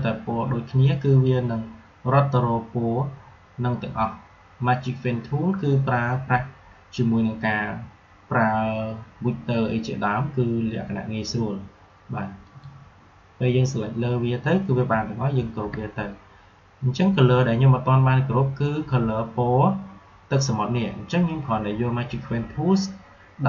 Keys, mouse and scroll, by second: 12.4 click, 15.6 ctrl+g.